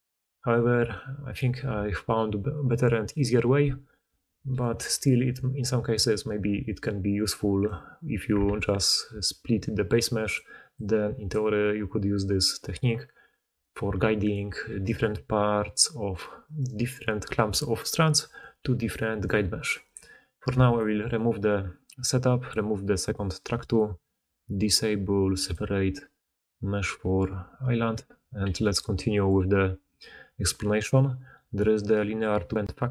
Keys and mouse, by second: 0.0-0.4 typing, 0.8-4.4 drag, 4.5-6.6 drag, 4.7 g, 6.7-7.5 drag, 7.5-11.5 drag, 8.3 alt+a, 9.0-13.9 d, 11.5 middle click, 11.5 right click, 14.2-16.3 drag, 14.9-16.3 d, 16.5-18.1 d, 18.3-19.5 drag, 18.5 g, 19.6 click, 19.9-23.7 drag, 19.9-21.0 right drag, 20.4 x, 25.3 click, 28.0 click, 28.4 g, 29.7 click, 29.9-32.9 middle drag.